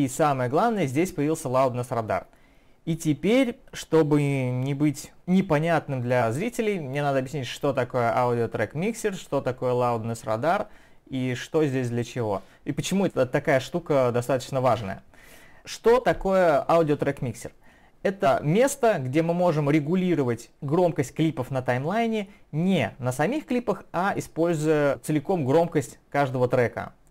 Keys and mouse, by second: 24.5 click, 27.0 click.